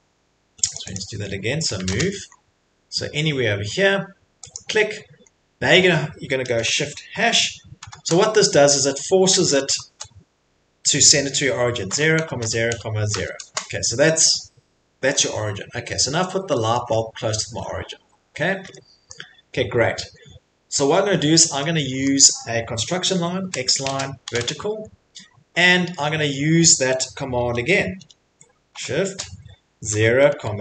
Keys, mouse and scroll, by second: 0.7 click, 1.8 m, 2.2 scroll, 4.5 click, 5.3 middle click, 5.3 middle click, 7.8 shift+3, 9.7 #, 11.6-13.6 typing, 14.1 middle click, 14.3 middle click, 15.1 middle click, 15.1 middle click, 15.7 middle click, 16.7 middle click, 16.9 middle click, 17.5 Escape, 18.0 middle click, 18.2 middle click, 19.1 middle click, 20.1 middle click, 20.1 middle click, 22.1 middle click, 22.6 middle click, 23.4-24.5 typing, 28.7-30.6 typing.